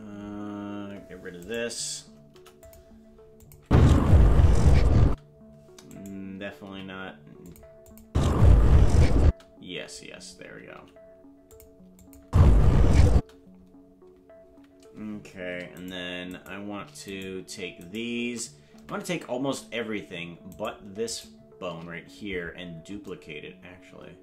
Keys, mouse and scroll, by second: 1.4 right click, 2.3 Delete, 3.4-4.8 drag, 3.6 space, 5.1 space, 5.9 right click, 6.6 g, 7.9-9.5 drag, 8.0 space, 10.7 g, 12.0-13.3 drag, 12.2 space, 13.1 space, 15.8 shift+right click, 16.4 shift+right click, 17.2 right click, 17.9 shift+right click, 18.8 a, 20.6 shift+right click.